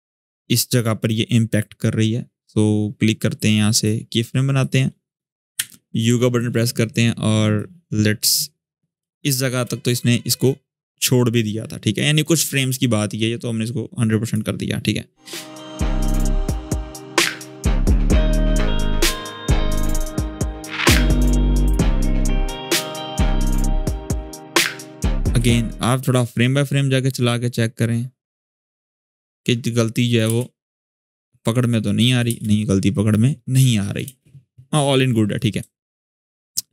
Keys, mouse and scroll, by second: 1.0-2.7 scroll up 1, 3.3 scroll up 1, 5.3 u, 5.9 shift+scroll down 1, 7.3-8.2 click, 8.4-8.7 scroll down 1, 8.7 space, 8.9 click, 9.2 space, 10.0-12.2 drag, 12.9-14.1 drag, 16.1 scroll up 1, 16.3 space, 16.4 click, 16.6 space, 17.2-18.7 drag, 19.3-20.1 click, 20.3 click, 20.7 scroll down 1, 20.9 space, 21.7-22.0 click, 22.1 scroll down 1, 22.2 space, 23.4 click, 23.7 space, 24.6-25.1 click, 25.1 ctrl+z, 25.3-30.0 drag, 30.0 space, 31.3-32.2 click, 32.0 space, 33.3-33.9 click, 33.8 space, 35.1-36.7 drag.